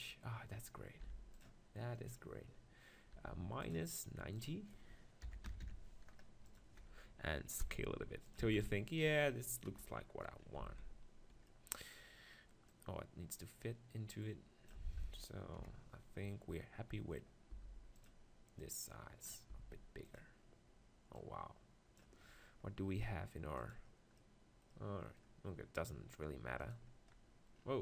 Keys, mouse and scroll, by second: 1.1 r, 1.4-3.2 drag, 3.2 middle click, 3.2 r, 3.7-6.3 drag, 7.6 s, 8.3-10.7 drag, 8.5 g, 10.6 z, 10.7 middle click, 12.7-14.6 drag, 15.5 KP_7, 17.5 s, 18.0-19.0 drag, 19.5 s, 22.9 click, 23.6-25.3 drag, 24.2-27.2 middle drag, 26.6-27.8 drag, 26.6 right click.